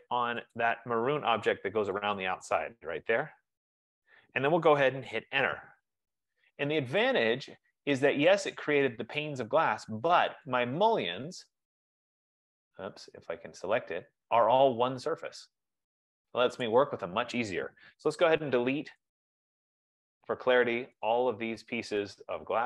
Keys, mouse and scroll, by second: 0.7 click, 2.5 click, 5.9 Return, 7.4 click, 8.6 click, 10.7 click, 12.4 click, 13.5 scroll, 13.9 click, 15.5 scroll, 16.9 click, 18.6 BackSpace, 19.1 click, 19.3 F15, 19.7 BackSpace, 20.1 click, 20.7 BackSpace, 21.1 click, 22.2 click, 22.5 F15.